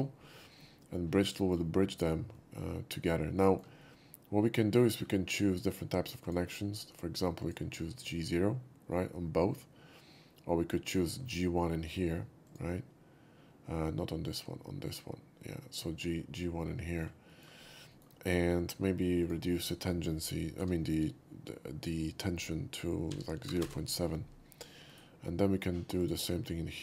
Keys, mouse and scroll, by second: 0.7-1.3 middle drag, 0.7 shift+q, 1.4 middle click, 2.4-3.1 middle drag, 3.4 shift+middle drag, 3.9-5.0 shift+middle drag, 6.3 shift+click, 7.5 click, 8.9-11.0 middle drag, 12.5 click, 14.3 click, 14.9 click, 15.7 middle click, 16.9 shift+middle click, 17.3 shift+middle click, 17.9 shift+middle click, 19.3 shift+click, 20.6 0, 23.1 ., 23.5 7, 23.6 Return, 24.9 right click, 26.0 click.